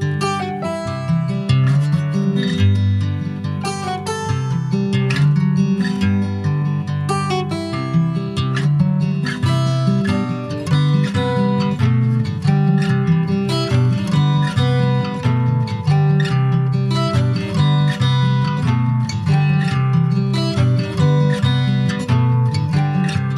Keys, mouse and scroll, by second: 0.3 scroll down 1, 0.8 middle click, 1.3 alt+z, 1.6 scroll up 3, 1.9 middle click, 2.6 click, 3.2 click, 3.8 click, 4.7 middle click, 5.2 scroll down 3, 5.4 middle click, 5.9 s, 6.7 alt+z, 7.1 alt+middle click, 7.6 alt+scroll down 1, 7.7 alt+middle click, 8.5 alt+middle click, 9.1 shift+middle click, 9.7 ctrl+s, 10.1 click, 11.4 alt+middle click, 12.6 r, 17.0 alt+middle click, 17.8 ctrl+s, 18.0-18.6 scroll up 2, 18.2 shift+middle click, 18.9 s, 20.5 click, 21.3 scroll up 4, 21.6 shift+middle click, 21.9-22.4 shift+scroll up 1, 22.5 click.